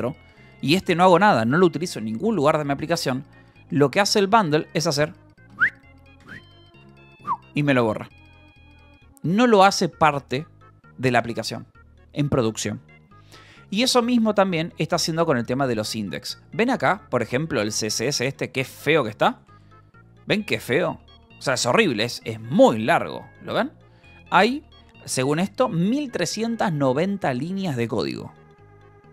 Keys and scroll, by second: 1.4 k, 2.3 j, 3.6 k, 5.4 d, 6.1 y, 6.7 BackSpace, 6.9 Return, 13.9 k, 14.5 j, 14.8 k, 14.9 Return, 15.4 j, 16.7 j, 17.6 Return, 17.8-22.6 typing, 24.0 l, 25.5 alt+shift+4.